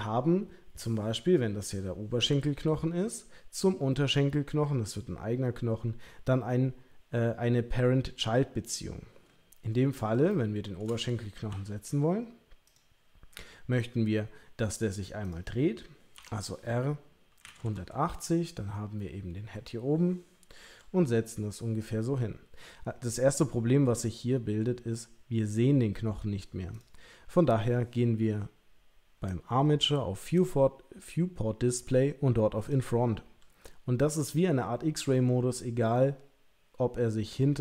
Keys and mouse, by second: 10.3 shift+middle click, 11.5 g, 15.2 click, 16.1 r, 20.6 g, 30.3 click, 32.6 click, 33.2 g.